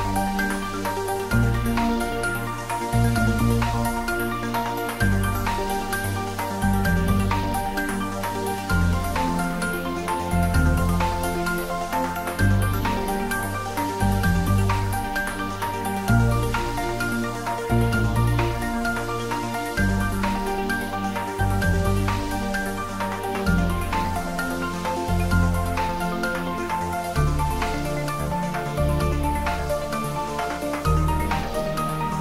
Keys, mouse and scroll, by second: 0.7 ctrl+click, 1.4 ctrl+z, 1.8 ctrl+click, 2.4 ctrl+z, 3.9 ctrl+click, 4.4 ctrl+z, 5.1 ctrl+click, 5.5 ctrl+z, 5.8 middle click, 6.5 ctrl+z, 7.5 shift+click, 8.9-10.2 middle drag, 10.2 ctrl+click, 10.7 ctrl+z, 11.4 shift+click, 11.9-13.6 middle drag, 13.6 ctrl+b, 16.3-17.1 scroll up 1, 20.8-22.5 scroll up 1, 23.4 click, 24.9-27.3 drag, 27.3 Tab, 27.5 middle click, 28.3 ctrl+3, 28.9-30.1 middle drag, 30.1 ctrl+3, 30.4 middle click, 30.8 ctrl+z.